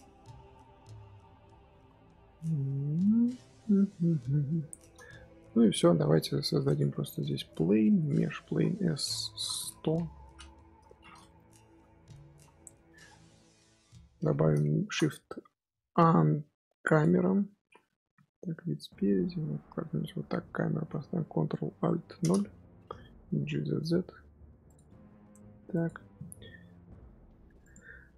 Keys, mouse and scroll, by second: 3.7-4.5 scroll down 9, 4.5-4.9 middle drag, 4.9-6.7 scroll up 3, 6.7 shift+s, 7.0 middle drag, 7.2 shift+a, 8.2 Tab, 8.4 s, 11.1 middle click, 11.3 Tab, 11.7 z, 12.3 z, 12.6-16.9 middle drag, 16.9 shift+a, 18.1 KP_1, 18.5-20.2 middle drag, 20.2-22.1 scroll up 2, 22.1 alt+KP_0, 23.2 g, 24.8 g, 27.6 click.